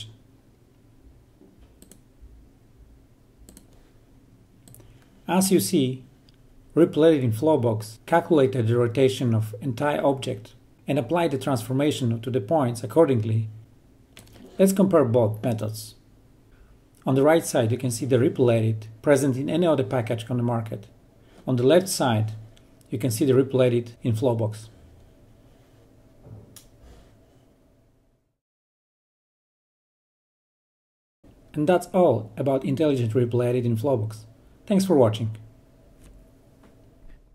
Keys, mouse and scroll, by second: 1.0-16.4 drag, 18.0 drag, 18.8 click, 21.9 click, 22.1 click, 22.7 click, 22.9 click, 27.1 click, 27.1-36.8 drag.